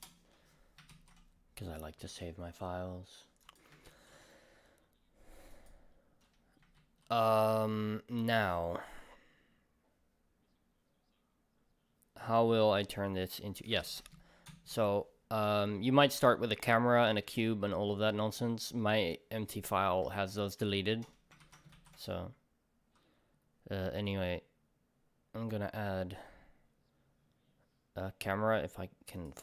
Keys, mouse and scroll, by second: 0.0 Return, 0.0-1.9 drag, 1.9-3.6 middle drag, 3.6-7.8 drag, 3.9 ctrl+s, 7.8-13.6 middle drag, 13.6 click, 15.5-16.0 scroll down 2, 16.0-16.5 scroll up 2, 16.5-29.3 middle drag.